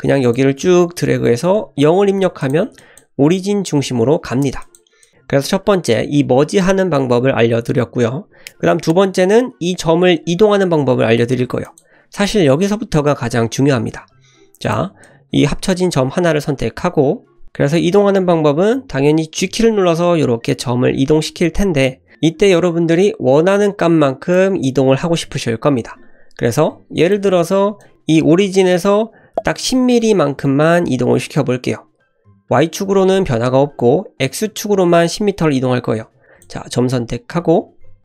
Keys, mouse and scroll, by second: 2.4 click, 2.8 click, 4.6 click, 5.0 click, 6.1-8.1 shift+middle drag, 11.6 click, 14.7 click, 15.1 click, 19.4 g, 36.2 click.